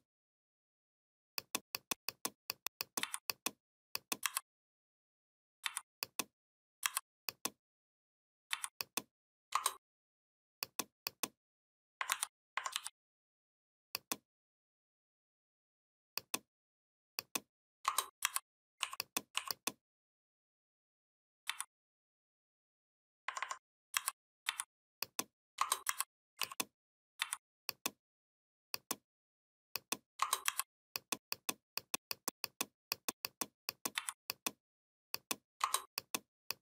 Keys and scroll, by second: 2.8 v, 4.0 m, 5.4 v, 6.6 m, 11.9 ctrl+c, 12.5 ctrl+f, 18.0 shift+m, 21.3 v, 23.7 m, 24.3 v, 25.7 shift+m, 27.0 v, 30.2 shift+m, 33.8 v.